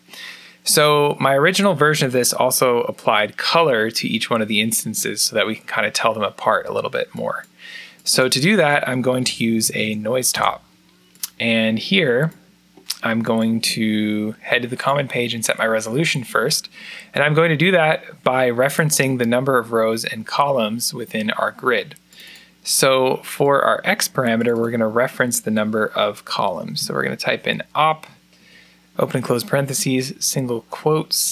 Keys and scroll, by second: 8.9-10.1 typing, 10.2 Return, 26.0-27.6 typing, 28.2 Left, 28.9-31.3 typing.